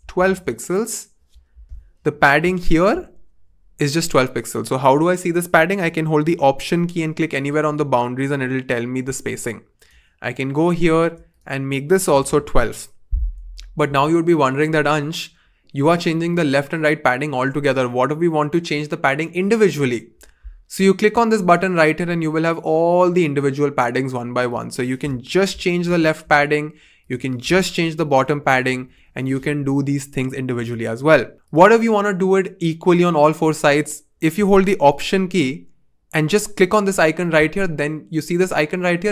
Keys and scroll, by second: 0.0-0.6 typing, 11.8-12.7 typing, 25.4 shift+Up, 25.5 shift+Up, 25.7 shift+Up, 28.0 shift+Up, 28.1 shift+Up, 28.4 shift+Up.